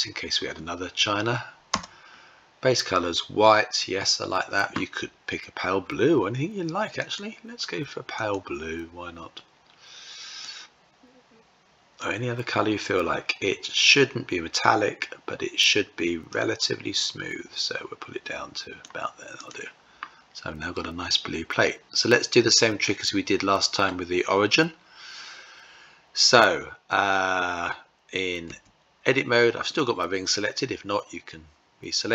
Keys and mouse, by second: 6.4 click, 7.6 click, 15.9-18.4 drag, 18.8 click, 20.2-23.3 middle drag, 27.9 Tab.